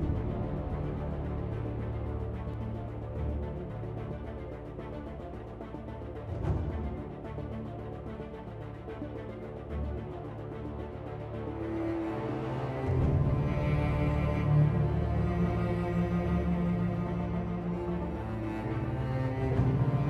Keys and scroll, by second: 0.5 Delete, 2.5 Delete, 3.3-3.9 typing, 5.3 r, 8.4 r, 14.1 r, 15.3 r.